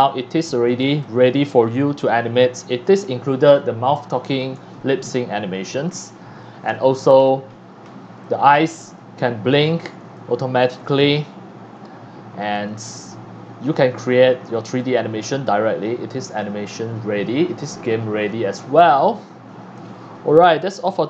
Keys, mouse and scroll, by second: 0.6 scroll down 1, 1.0 x, 1.0-2.0 drag, 1.3 c, 5.0-5.5 scroll up 2, 5.7 x, 5.7 click, 6.1 c, 6.7 x, 6.7 click, 7.2-7.7 scroll up 2, 7.9 scroll down 1, 8.2 x, 8.2 click, 8.7 click, 9.6-10.0 scroll down 2, 10.1 x, 10.1 click, 10.8 c, 12.5 click, 13.7 scroll up 1, 14.1 scroll down 1, 14.7 x, 14.8-16.4 drag, 15.3 c, 16.7 scroll down 1, 17.4 scroll up 1, 17.9 scroll down 1, 18.3 click, 18.9 x.